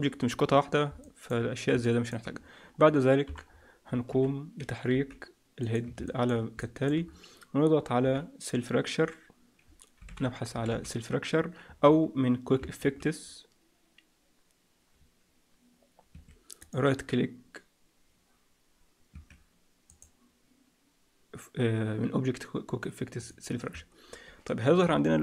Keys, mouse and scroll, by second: 0.9 middle click, 1.7 middle click, 2.3 scroll down 1, 2.7-3.4 scroll up 2, 3.2 KP_1, 3.4-4.7 scroll down 8, 4.0 f, 4.9 g, 6.0 shift+middle click, 6.5 middle click, 6.9-7.7 scroll up 2, 7.7-8.1 scroll up 3, 8.1 F3, 10.6 l, 12.7 shift+a, 16.5 right click, 19.8 click.